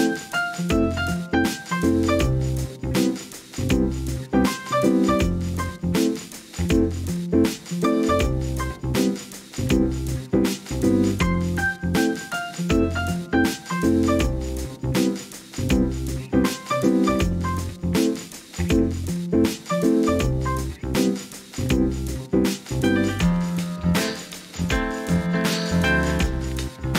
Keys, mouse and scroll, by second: 0.0 click, 0.7 click, 1.3 alt+z, 5.0 ctrl+b, 11.7 click, 12.8 click, 14.7-17.1 middle drag, 17.7 s, 17.9 x, 19.2 alt+z, 19.7 middle click, 20.5 KP_1, 21.4 Tab, 22.6-24.0 middle drag, 24.9 right click, 25.5 middle click, 26.0 click, 26.6 KP_1, 26.7 alt+z.